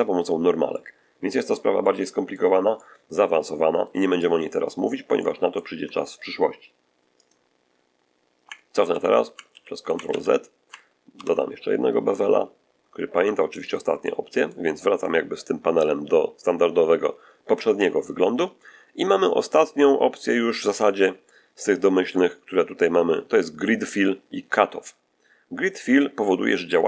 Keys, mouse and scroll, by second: 0.6 middle click, 1.7 middle click, 2.7-3.9 middle drag, 4.1 middle click, 5.1 middle click, 7.1 click, 8.8 ctrl+z, 9.4 ctrl+z, 10.0 ctrl+z, 11.0 ctrl+b, 13.4 click, 13.9 middle click, 14.7 middle click.